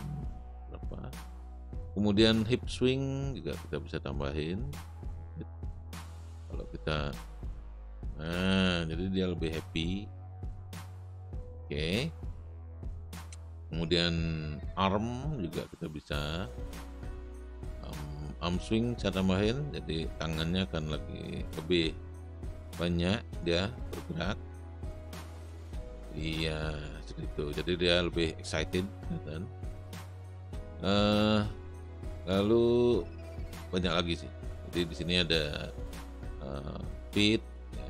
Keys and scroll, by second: 7.1 space, 12.8 space, 25.0 space, 32.1 space.